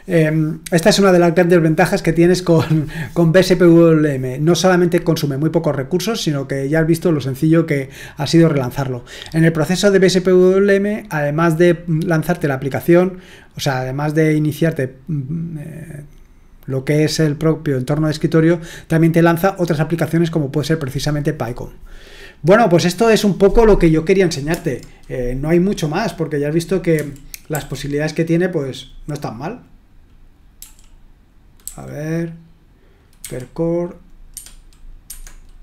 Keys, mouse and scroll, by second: 26.9-27.5 typing, 30.6 typing, 31.6 typing, 34.3 Escape, 35.0 Escape.